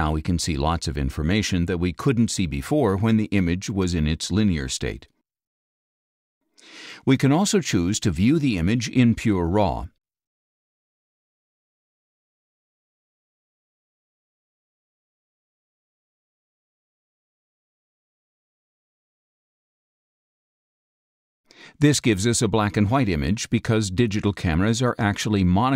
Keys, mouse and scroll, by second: 10.0 click, 12.2 click, 14.6 click, 16.2 click, 18.4-19.8 drag, 21.1 click, 22.3 ctrl+a, 24.6 click, 25.6-25.7 scroll down 6.